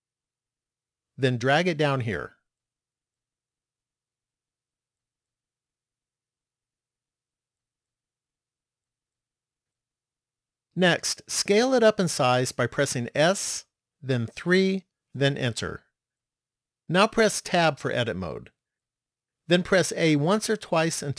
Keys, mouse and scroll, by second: 2.0 click, 5.6 middle click, 7.5-8.8 scroll up 3, 8.8 shift+middle click, 13.3 s, 17.5 Tab, 20.0 a, 20.6 a.